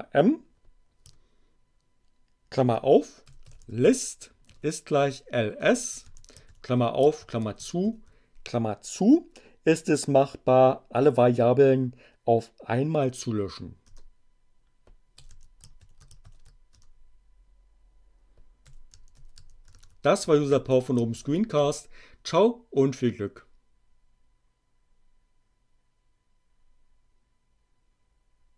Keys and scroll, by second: 2.4-7.1 typing, 13.7 Return, 14.7-16.1 typing, 16.7 shift+Return, 18.4-21.0 typing, 21.5 shift+Return.